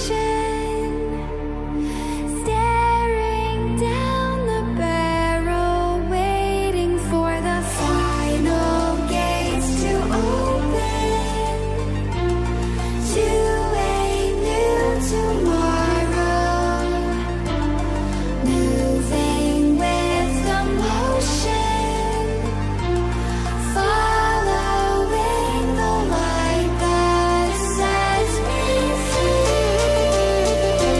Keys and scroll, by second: 2.6 ctrl+space, 5.9 space, 12.4 ctrl+0, 13.5 ctrl+0, 19.3 ctrl+space, 21.0 ctrl+0, 23.3 ctrl+t.